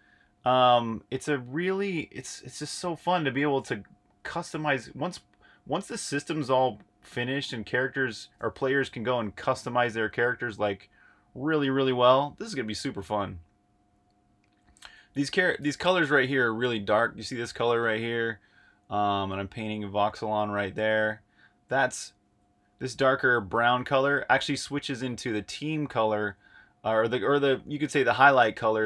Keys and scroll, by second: 8.5 8, 22.2 super+z.